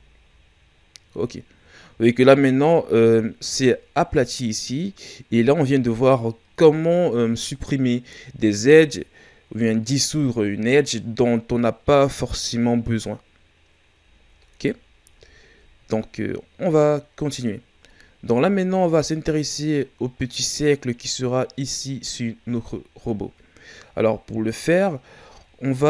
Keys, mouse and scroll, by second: 0.2 scroll down 4, 3.4 scroll up 1, 13.3 scroll down 2, 15.1 shift+scroll down 5, 16.0-18.4 scroll up 2, 18.4 shift+scroll down 2, 23.8-25.5 scroll down 1, 25.5-25.8 scroll up 1.